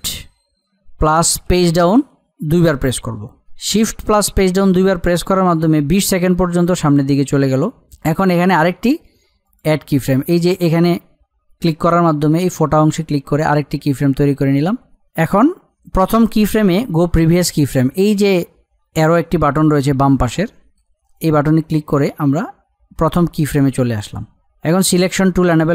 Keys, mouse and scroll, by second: 1.4 shift+Page_Down, 9.4 click, 21.1 click, 25.6 click.